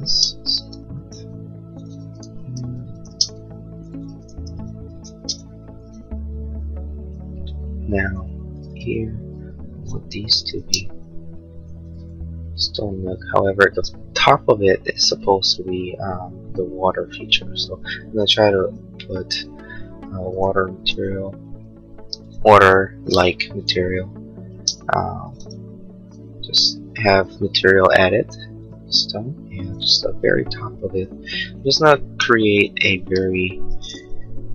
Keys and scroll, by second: 0.0 space, 0.4 Escape, 2.2 ctrl+a, 2.7 b, 3.2 Escape, 4.3 ctrl+a, 4.7 b, 5.2 space, 5.6 Escape, 9.2 ctrl+a, 9.6 b, 10.3 space, 10.8 Escape, 20.4 ctrl+a, 24.5 space, 24.8 Escape, 34.4 l.